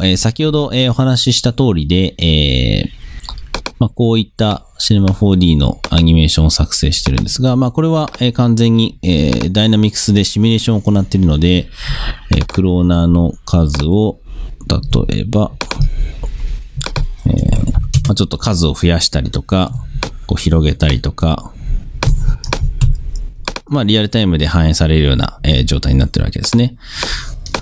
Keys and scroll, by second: 17.8 8, 18.0 Home.